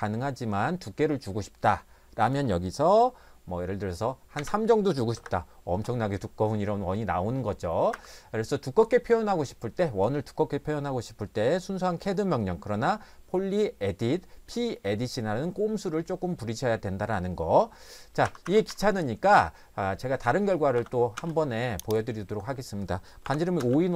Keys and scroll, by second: 4.3 3, 5.1 Return, 7.9 Escape, 18.3 Escape, 18.5 Escape, 18.7 Escape, 20.8 c, 21.1 space, 23.2 5, 23.6 space.